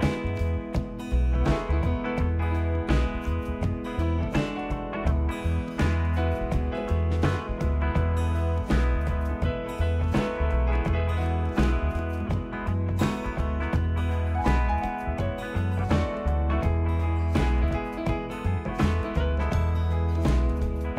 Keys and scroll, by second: 9.2 Delete, 12.1 ctrl+g.